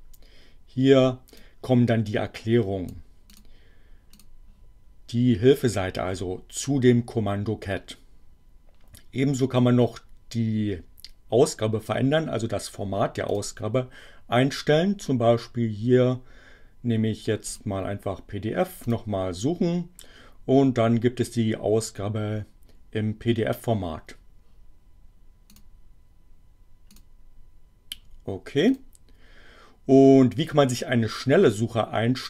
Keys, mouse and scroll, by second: 1.4-3.1 drag, 3.3 click, 4.1 click, 13.3 click, 17.5 click, 18.8 click, 25.4 click, 26.9 click, 28.7 click.